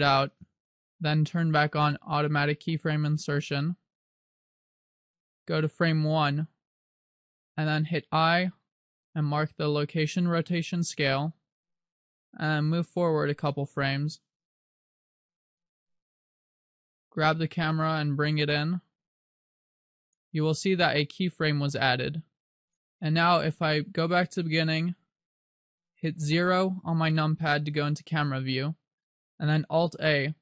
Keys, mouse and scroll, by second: 0.5 click, 3.5 click, 6.3 click, 12.7 click, 16.7 g, 19.1 click, 19.3 r, 20.3 click, 22.0 click, 24.5 click, 25.9 click, 28.4 KP_0.